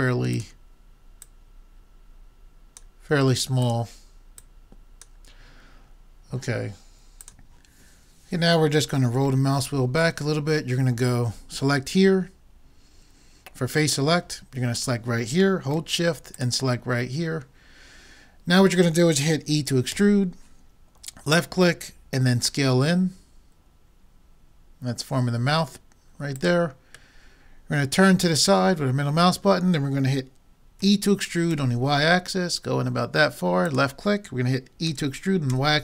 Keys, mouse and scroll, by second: 0.4-2.9 drag, 3.6-6.2 drag, 9.3-11.4 middle drag, 14.0-18.1 drag, 20.0 e, 22.3 s, 27.2-29.1 middle drag, 30.9 e, 34.9 e.